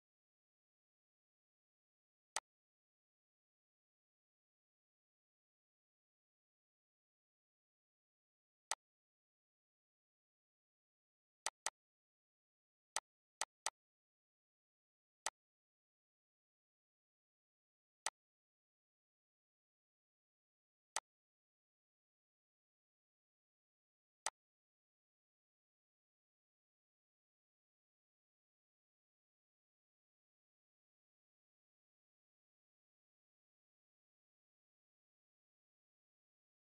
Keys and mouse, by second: 0.3 Delete, 1.4 ctrl+d, 2.0 click, 3.5 click, 4.6 click, 8.6 click, 9.6 click, 10.4 Delete, 10.8 click, 11.0 Delete, 14.0 click, 14.9 click, 16.8 click, 18.3 click, 19.4 click, 21.0 click, 23.6 click, 24.6 click, 26.4 click, 27.2 click, 31.5 click, 33.0 click, 36.0 click.